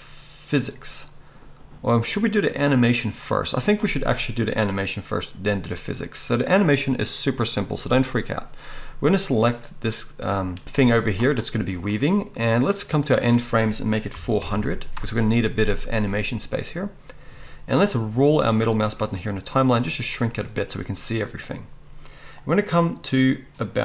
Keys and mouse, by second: 7.3 click, 10.6-23.8 drag, 10.6-11.8 middle drag, 10.7 g, 14.5 0.